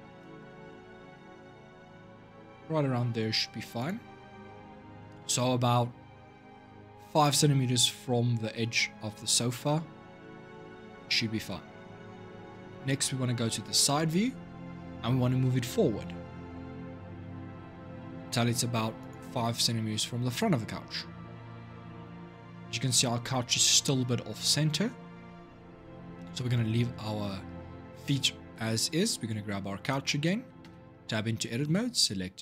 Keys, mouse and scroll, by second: 12.5 click, 13.5 shift+middle click, 14.0-15.6 scroll up 1, 15.6 g, 25.5 Tab, 25.9 scroll down 1, 27.9 middle click, 28.8 click, 29.6 shift+click, 30.4 Tab, 31.4 a.